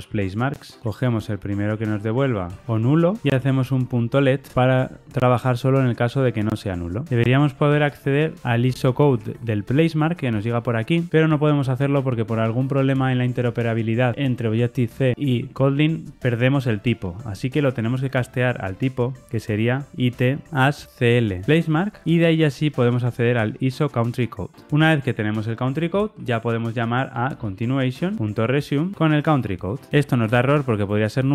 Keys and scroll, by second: 0.8 Return, 4.5 Return, 7.1 ctrl+shift+Left, 21.5 Return, 28.2 Return.